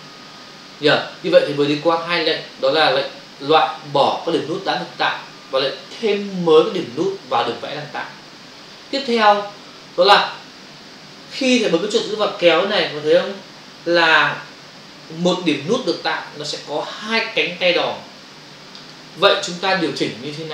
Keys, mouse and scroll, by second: 12.4 click.